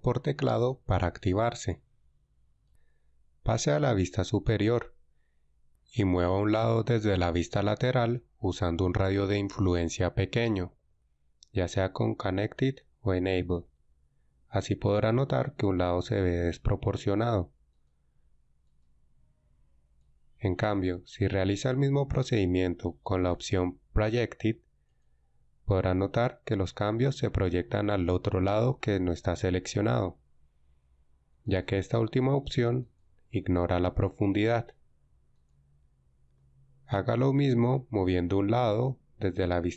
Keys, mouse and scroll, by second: 4.4 KP_7, 38.0 KP_1.